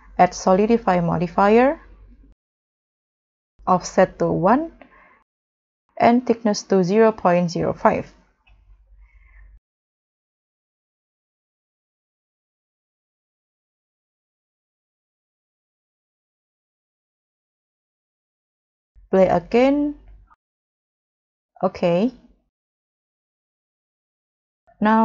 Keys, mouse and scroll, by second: 4.5 1, 4.6 Return, 6.7 double click, 7.2 double click, 8.0 double click, 8.1 middle click, 10.0 scroll up 1, 10.3 middle click, 16.9 1, 17.0 Return, 17.9 scroll down 1, 18.1 middle click, 21.7 middle click, 22.9 middle click, 23.0 scroll up 2.